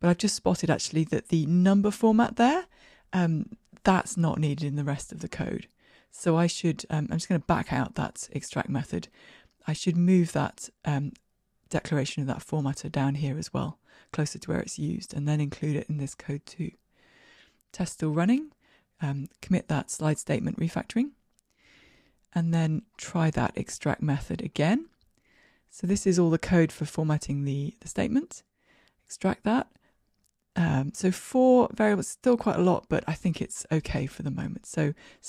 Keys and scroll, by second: 6.5 super+z, 11.8 super+x, 14.3 super+v, 16.5 ctrl+r, 16.5 shift+F10, 18.4 super+k, 22.0 shift+Escape, 28.2 alt+super+m.